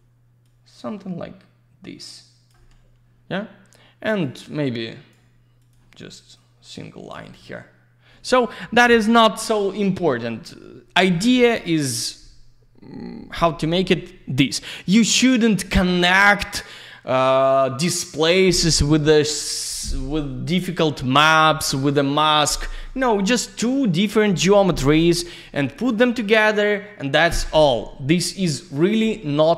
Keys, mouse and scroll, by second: 0.4 click, 4.1 click, 4.2 click, 4.6 click, 5.6 click, 5.7 click, 6.3 click, 28.6 click.